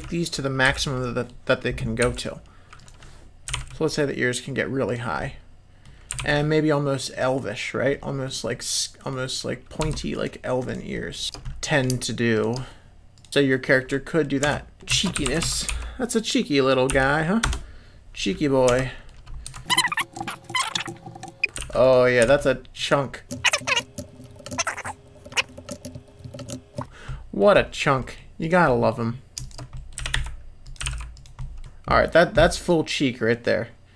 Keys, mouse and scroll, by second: 0.6 l, 0.9 click, 2.0 l, 2.8 click, 3.5 g, 5.2 middle click, 6.1 s, 7.9 middle click, 8.5 middle click, 9.8 2, 10.1 click, 10.6 click, 10.9 middle click, 11.2 shift+click, 11.4 middle click, 12.3 shift+click, 13.1 click, 13.3 middle click, 13.3 g, 13.9 middle click, 14.5 Tab, 14.8-18.0 shift+drag, 15.4 e, 18.7 Tab, 18.8 middle click, 19.5-22.2 typing, 19.6 click, 19.6 middle click, 20.3 click, 20.7 middle click, 21.0 click, 21.0 middle click, 21.1 shift+click, 23.5 click, 23.5-26.4 typing, 23.6 middle click, 23.7 shift+click, 24.1 click, 24.3 middle click, 24.4 shift+click, 25.0 click, 25.1 click, 25.2 shift+click, 25.9 middle click, 26.2 middle click, 26.3 shift+click, 26.4 middle click, 26.7 middle click, 27.0 middle click, 28.0 middle click, 28.4 click, 28.6 middle click, 29.4 shift+click, 29.7 middle click, 29.9 g, 30.8 g, 31.4 middle click, 31.6 Tab, 32.6-33.9 drag.